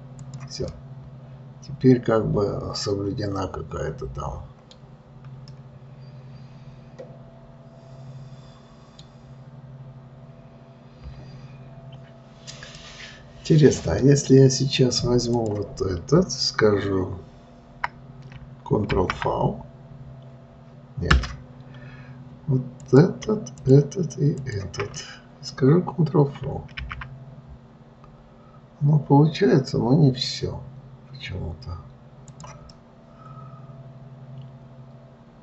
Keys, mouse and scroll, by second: 0.6 click, 1.1-4.0 middle drag, 5.1-5.9 scroll down 3, 5.9-8.9 middle drag, 13.1-15.7 middle drag, 15.7 click, 23.2 click, 24.0 shift+click, 24.7 shift+click, 25.3-27.1 middle drag, 27.1 alt+v, 33.1-35.4 middle drag.